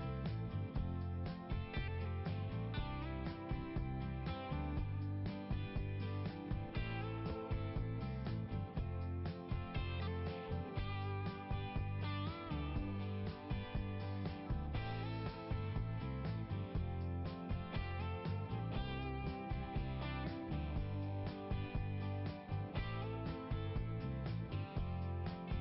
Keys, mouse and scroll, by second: 1.7 click, 4.0 scroll up 1, 6.8 click, 8.1 click, 9.0 click, 10.9 click, 13.9 click, 14.0 click, 16.0 click, 16.5-17.9 scroll up 1, 18.0 click, 18.9 click, 19.8 click, 20.2 click, 20.3 click, 21.0 click, 22.8 click, 23.5 scroll up 1, 25.1-25.6 scroll down 1.